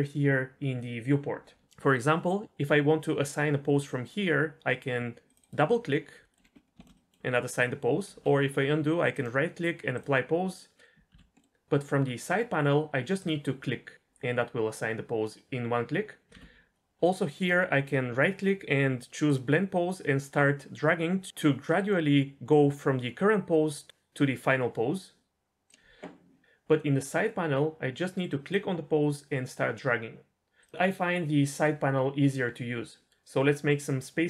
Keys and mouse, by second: 5.3 click, 6.3 middle drag, 6.8-7.8 shift+middle drag, 8.1 ctrl+z, 9.1-9.7 right drag, 10.8 middle click, 11.1 ctrl+z, 11.4 middle click, 16.3 ctrl+z, 17.5-19.3 right drag, 29.0 click.